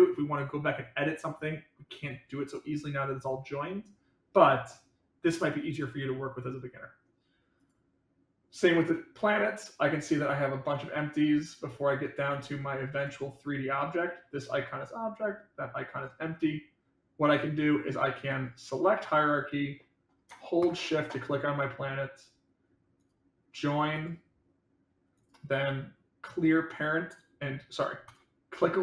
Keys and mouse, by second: 7.6 click, 10.2 click, 11.5 click, 12.4 click, 13.0 click, 20.5 shift+click, 28.0 click.